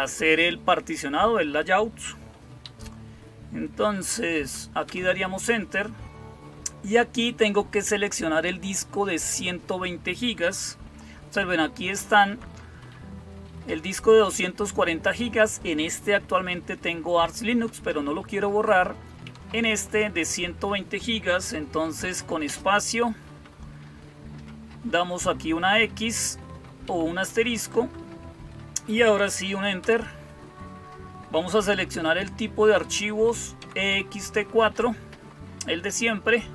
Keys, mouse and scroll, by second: 2.2 Down, 2.5 Up, 4.7 Return, 11.7 Down, 12.0 Down, 12.2 Down, 12.7 Up, 13.1 Up, 13.3 Up, 19.1 Down, 22.3 space, 26.7 Down, 27.2 Up, 29.7 Return, 33.5 Down.